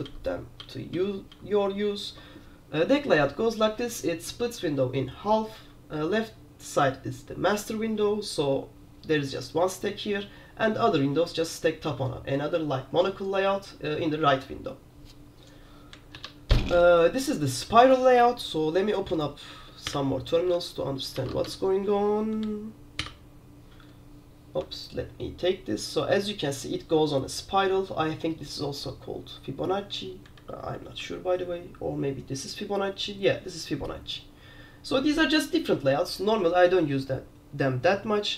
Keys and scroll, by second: 0.2 super+j, 0.7 super+j, 1.0 super+j, 1.4 super+j, 1.8 super+j, 16.2 alt+5, 20.0 super+p, 21.3 super+r, 31.1 alt+6, 31.2 alt+6.